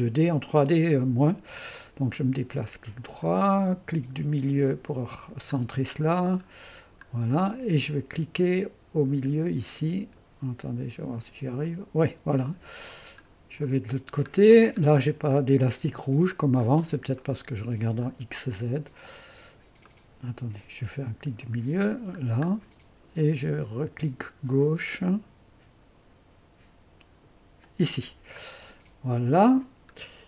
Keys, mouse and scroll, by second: 2.2-4.7 drag, 4.7 middle click, 5.6-8.0 scroll up 6, 6.0 middle click, 6.2 middle click, 11.6-12.6 drag, 12.6-14.0 scroll down 1, 15.3-16.5 drag, 17.2 click, 19.9 click, 21.2 middle click, 21.9-22.5 scroll up 2, 27.6 click, 28.4-29.7 scroll down 2, 29.7-30.2 middle drag.